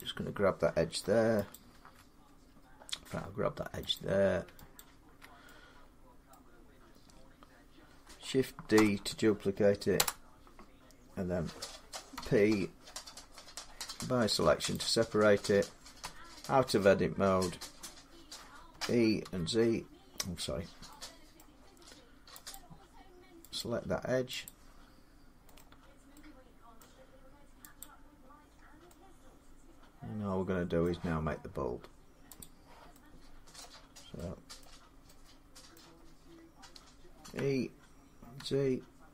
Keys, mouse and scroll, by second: 1.4 alt+click, 3.8 click, 4.6 alt+click, 6.2 middle click, 8.6 shift+d, 9.8 Return, 12.0 p, 14.6-19.6 drag, 15.8 Tab, 18.5-19.0 typing, 20.8 middle click, 21.2-22.3 scroll down 1, 21.2 z, 22.3 click, 23.4 click, 24.3 click, 25.3 scroll down 2, 26.6 middle click, 26.6 scroll up 2, 27.6 click, 27.6-28.2 scroll down 1, 28.2 scroll down 5, 30.6-33.4 middle click, 32.2 click, 33.4 middle click, 34.4 middle click, 35.6 middle click, 37.1 e, 38.2 z.